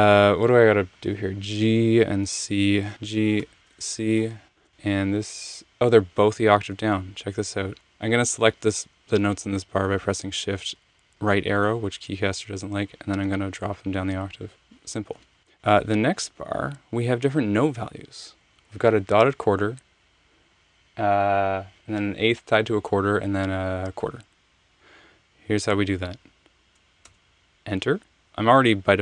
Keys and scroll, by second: 2.9 g, 3.4 c, 4.6 Return, 4.6 Left, 10.6 alt+super+Page_Down, 15.2 Left, 15.4 Right, 15.4 Right, 27.0 Return.